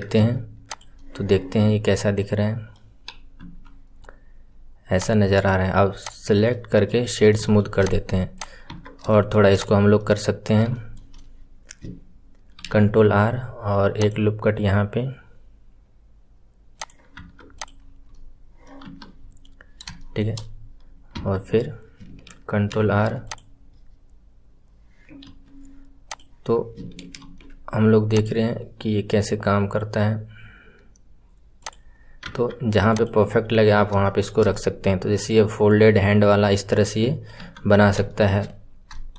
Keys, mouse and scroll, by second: 0.6 click, 0.9-1.7 middle drag, 1.7-2.1 scroll down 1, 2.1-3.3 middle drag, 3.3 KP_1, 3.9-4.2 scroll up 5, 4.9 click, 6.0-6.4 right drag, 6.4-7.0 middle drag, 7.0-7.4 scroll down 2, 7.4-7.7 shift+middle drag, 7.7 click, 8.3 click, 9.0-9.5 shift+middle drag, 9.5 click, 9.9-11.1 middle drag, 11.1-12.5 scroll up 1, 12.5 ctrl+r, 17.5 click, 17.7 scroll down 1, 18.0-18.7 middle drag, 18.7 KP_1, 19.1 scroll up 1, 19.9-21.1 shift+middle drag, 21.1 Tab, 22.7 ctrl+r, 26.0 click, 27.1 ctrl+r, 32.2 Tab, 32.9 click, 33.2-33.5 scroll down 1, 34.0-37.3 shift+middle drag, 37.3 KP_1, 37.7 scroll down 1, 38.0-38.5 shift+middle drag, 38.5-38.9 scroll up 5, 38.9-39.1 shift+middle drag.